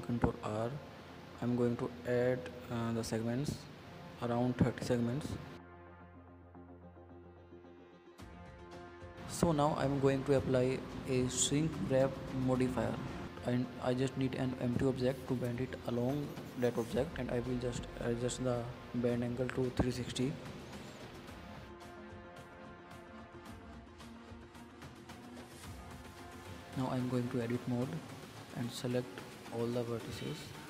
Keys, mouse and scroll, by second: 0.1 ctrl+r, 2.1-3.6 drag, 3.8 middle click, 4.1 click, 4.3 middle click, 4.6 scroll up 5, 4.8 middle click, 5.8 scroll down 2, 6.0-7.1 middle drag, 7.1 Tab, 7.3 scroll down 4, 7.6-8.1 middle drag, 8.1 scroll up 3, 8.1-9.4 middle drag, 10.4 click, 11.4 click, 11.6-13.1 middle drag, 13.3 click, 13.4-14.4 middle drag, 14.4 shift+a, 16.8-17.4 middle drag, 17.4 click, 17.9 click, 18.9-19.6 middle drag, 19.6-21.1 drag, 21.7 ctrl+z, 21.9-22.9 middle drag, 22.9-25.4 drag, 25.6-26.2 middle drag, 26.2-26.7 scroll up 8, 26.7-27.4 middle drag, 27.4 scroll down 5, 27.7-29.2 middle drag, 30.4 middle click.